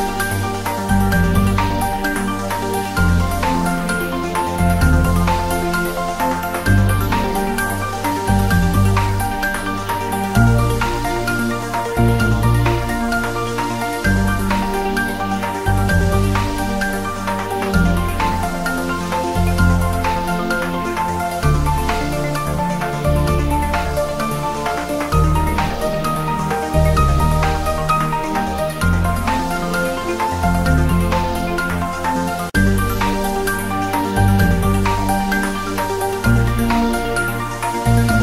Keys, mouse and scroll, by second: 0.4 shift+click, 0.9 g, 1.5 y, 2.4 click, 2.4 scroll down 1, 3.4 shift+z, 4.0 Tab, 4.8-5.4 scroll up 1, 5.4 click, 5.5 scroll down 1, 5.8 s, 6.0 click, 6.2 g, 6.7 click, 7.0 r, 7.9 click, 8.2 s, 8.5 click, 8.9 g, 9.4 click, 9.9-10.3 scroll up 1, 10.3 g, 10.7 Down, 11.6 Return, 12.2 click, 12.4 scroll down 1, 12.9 s, 13.4 click, 13.9 scroll up 1, 14.5 click, 15.4 s, 15.6 click, 15.7 g, 16.8 click, 17.6 scroll down 1, 18.2 click, 18.8 s, 19.2 click, 19.4 g, 20.0 click, 20.1 scroll up 1, 20.5 click, 20.8 Tab, 21.2 2, 21.6 click, 22.4 ctrl+b, 23.2 click, 23.3 ctrl+z, 23.7-24.8 drag, 25.6-25.9 scroll down 1, 26.4 click, 26.8 ctrl+b, 29.3-29.7 scroll down 1, 29.7 click, 29.9 Tab, 30.3-31.5 drag, 31.5 scroll up 1, 32.1 click, 32.4-33.1 scroll up 2, 32.6 Tab, 33.1 click, 33.6 alt+shift+click, 34.8 alt+shift+click, 37.0 ctrl+b, 37.8 click, 38.1 Tab.